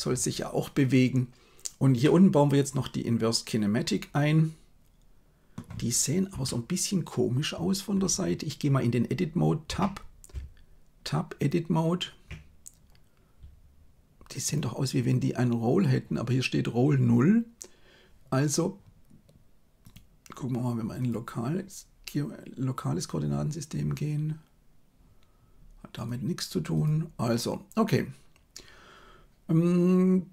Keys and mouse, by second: 2.0-5.5 middle drag, 6.2 KP_3, 9.7 Tab, 10.3 Tab, 19.8-23.9 drag, 25.9-27.4 drag.